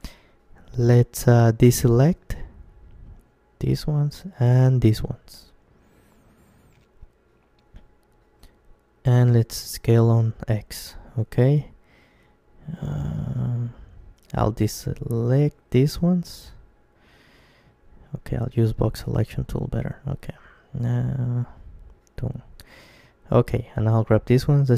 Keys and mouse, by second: 0.1 c, 7.4-9.2 right drag, 8.3 s, 9.4 s, 12.8-14.7 drag, 14.3 c, 18.7-20.7 right drag, 18.9 b, 23.5 g.